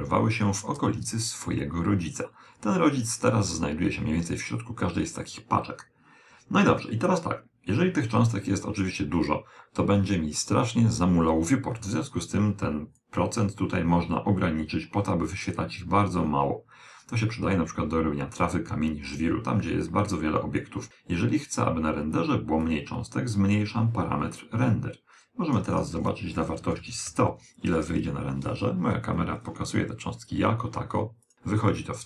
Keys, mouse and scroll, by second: 0.1-1.6 middle drag, 12.9 click, 22.6 click, 25.7 click, 27.0 0, 28.5 KP_0, 31.2 click.